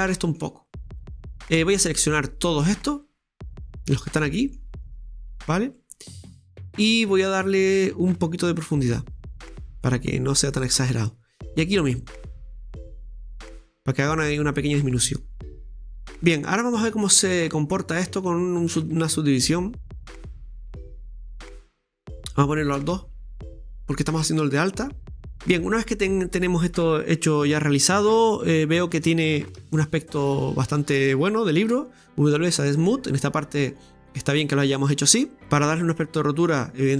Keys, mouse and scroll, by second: 1.6 right click, 2.7-3.8 drag, 3.8 right click, 4.1-5.2 middle drag, 5.2 shift+right click, 5.5-5.8 scroll down 2, 5.8-6.9 middle drag, 6.9 shift+right click, 7.3-8.6 middle drag, 8.6-10.1 drag, 10.1-11.3 middle drag, 11.3 right click, 12.1 shift+right click, 13.0 shift+right click, 13.4-14.5 drag, 15.8 click, 15.8 scroll down 2, 16.0-18.8 middle drag, 18.9-22.1 drag, 22.6-25.9 middle drag, 26.0-28.1 scroll up 1, 28.1-28.6 scroll up 1, 28.6 scroll down 2, 28.7-31.7 middle drag, 31.7 w, 32.8-35.4 middle drag, 35.4-36.5 scroll up 1, 36.5 right click.